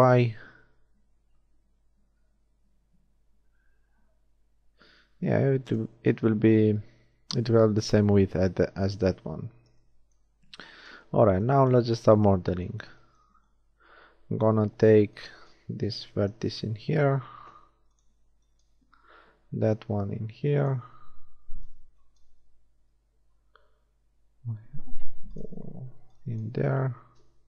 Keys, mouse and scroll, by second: 9.0 KP_1, 13.9 shift+a, 15.0 b, 16.3 g, 18.1 a, 18.3 b, 18.7 g, 21.1 a, 21.5 b, 22.7 g, 25.7 a, 26.0 b, 26.5 g.